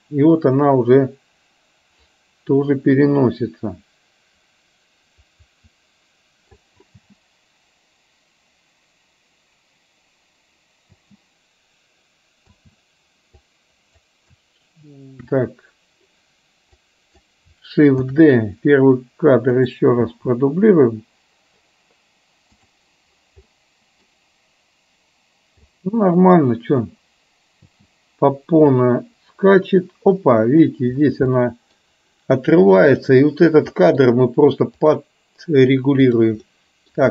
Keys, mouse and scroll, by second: 11.3 space, 12.5 a, 13.4-14.0 drag, 16.8-17.3 drag, 19.7 shift+d, 20.9 space, 22.5 click, 23.5-24.0 middle drag, 25.8-26.4 middle drag, 28.2 space, 28.7-30.7 drag, 31.4 middle click, 32.9 click, 33.9 middle click, 34.8 click, 36.2 click, 36.5-36.9 middle drag.